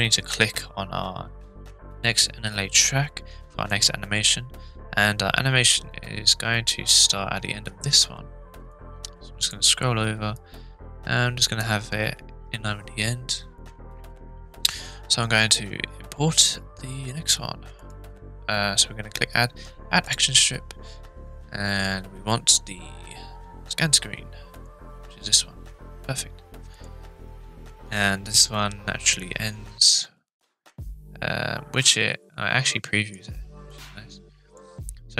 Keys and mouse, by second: 3.7-7.1 drag, 8.9-9.6 drag, 10.3 click, 17.8-24.7 drag, 26.7 click, 28.3-33.1 drag, 33.7 click.